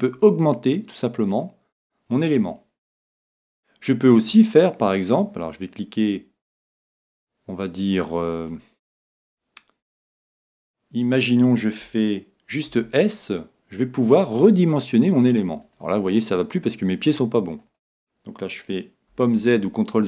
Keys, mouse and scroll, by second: 0.1-1.9 middle drag, 6.5-8.4 middle drag, 12.7 s, 15.7-17.4 drag, 16.1-18.0 middle drag, 19.3 super+z.